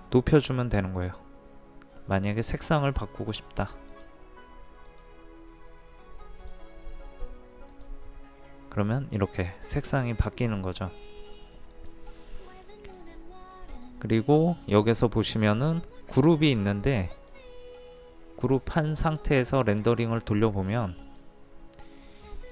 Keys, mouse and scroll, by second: 2.1-22.5 drag.